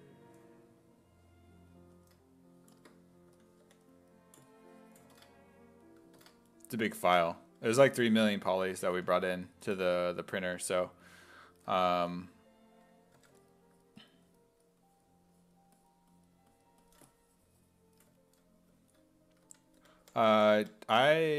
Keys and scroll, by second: 3.3 s, 3.6 5, 5.2 alt+Tab, 6.2 alt+Tab, 6.9 s, 7.7 1, 9.0 1, 12.0 s, 13.2 1, 19.2-21.1 typing.